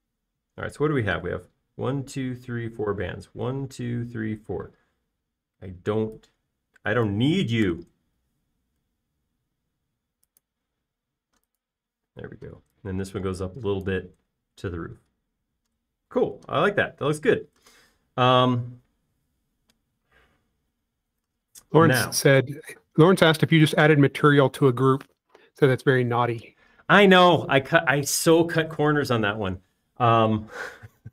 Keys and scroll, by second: 8.9 BackSpace, 10.2 i, 13.6 p, 16.5 space, 23.5 b, 24.4 space, 26.0 b.